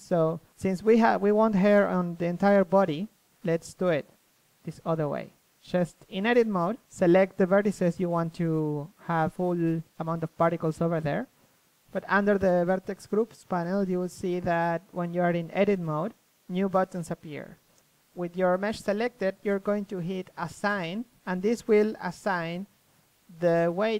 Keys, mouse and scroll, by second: 0.1 b, 1.6 click, 2.5 ctrl+z, 2.7 c, 3.7 click, 4.1 KP_1, 4.2 z, 4.9 KP_3, 6.0 click, 6.4 ctrl+z, 7.4 KP_3, 7.8 click, 9.8-11.4 middle drag, 15.3 Tab, 15.9 Tab.